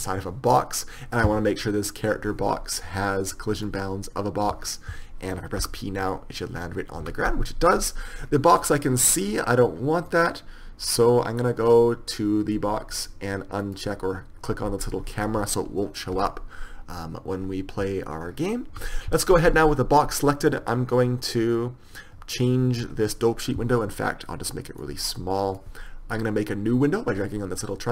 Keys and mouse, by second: 4.0-6.0 drag, 7.4 p, 14.0-16.6 drag, 19.1 p, 22.5-27.9 drag.